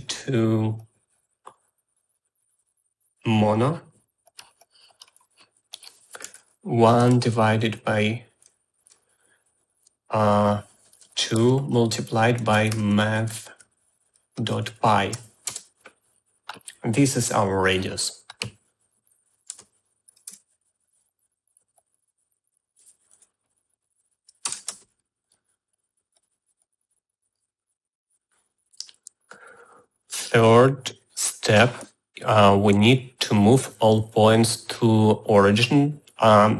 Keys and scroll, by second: 6.7-7.9 typing, 11.3-15.6 typing, 15.8 Return, 19.8 Tab, 20.1-21.1 typing, 23.5 r, 24.7 BackSpace, 25.3 shift+r.